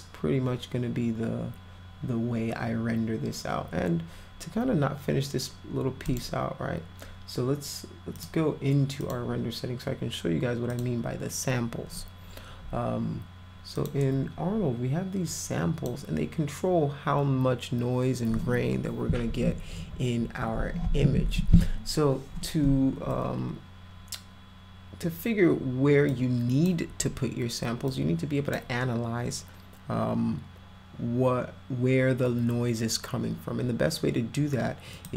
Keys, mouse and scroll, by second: 6.1 click, 8.2 click, 9.0 click, 10.7 click, 13.8 click, 15.3 click, 26.1 click, 27.9 click, 34.9 click.